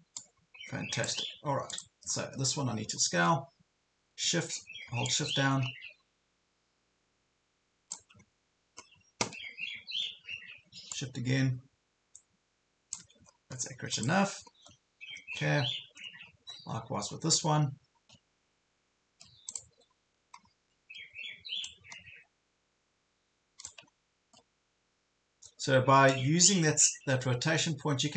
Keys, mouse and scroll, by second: 0.3 click, 2.2 ctrl+scroll up 1, 2.9 ctrl+scroll down 1, 5.1-8.2 shift+drag, 8.3 ctrl+scroll up 1, 9.7 ctrl+scroll up 1, 10.9 shift+click, 13.3 ctrl+scroll down 1, 13.9 click, 14.5 ctrl+scroll down 1, 15.4 scroll up 2, 16.3 ctrl+scroll up 1, 16.7 scroll down 1, 17.9 ctrl+scroll up 1, 18.8 ctrl+scroll down 1, 19.5 click, 19.9 ctrl+scroll up 1, 20.4 ctrl+scroll down 1, 21.7-23.9 shift+drag, 23.9 ctrl+scroll up 1, 26.1-28.1 shift+drag.